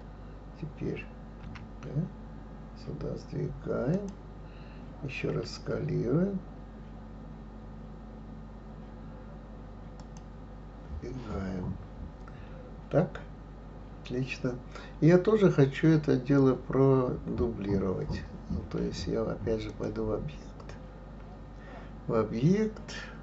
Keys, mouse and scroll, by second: 1.4 g, 5.3 s, 19.7-22.7 drag.